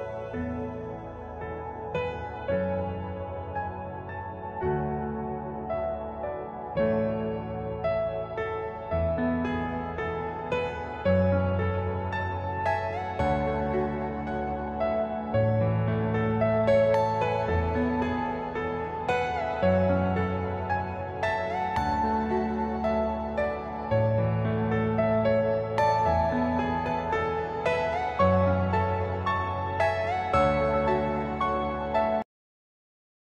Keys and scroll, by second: 11.5 F3, 12.0 F2, 19.9 space, 20.0 F3, 20.5 F4, 22.2 c, 22.5 shift+F2, 22.9 Escape, 23.3 F3, 25.2 ctrl+z.